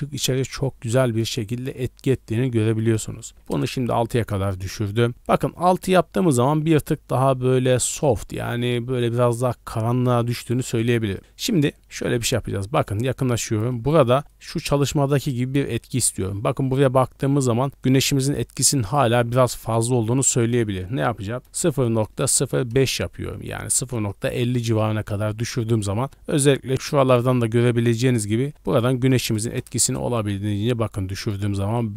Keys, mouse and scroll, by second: 2.8 click, 10.5 middle click, 11.0 middle click, 11.2 scroll up 1, 12.4-12.8 scroll up 4, 13.4 shift+middle drag, 14.3 middle click, 14.6 scroll down 1, 16.4 d, 16.7-19.0 drag, 19.0 d, 20.4-22.7 drag, 28.6-29.9 drag.